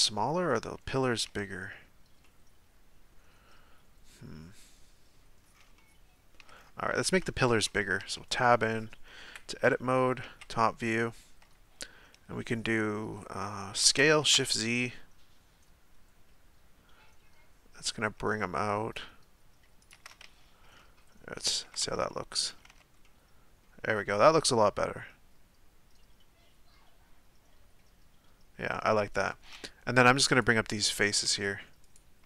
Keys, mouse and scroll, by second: 5.4-5.7 scroll up 1, 5.7-6.6 shift+middle drag, 6.6-7.0 scroll down 3, 7.0-7.4 shift+middle drag, 7.4-8.0 scroll up 1, 8.0 Tab, 8.6 middle click, 9.3 KP_7, 10.4 z, 13.9 s, 20.4 z, 20.8-21.7 middle drag, 21.7 a, 21.8 a, 22.1 middle click, 22.5 scroll down 2, 22.7 Tab, 23.1-23.9 middle drag, 23.9-24.3 scroll up 2, 24.3-27.3 middle drag, 29.3 Tab, 30.3 right click, 31.8 shift+right click.